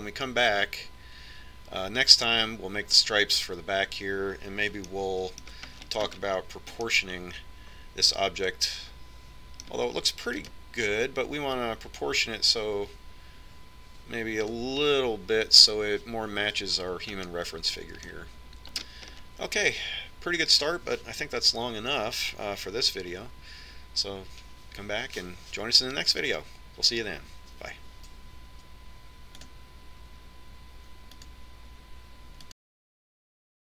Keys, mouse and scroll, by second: 6.1-9.8 middle drag, 11.5-13.4 right drag, 12.7-14.5 drag, 18.5-22.2 middle drag.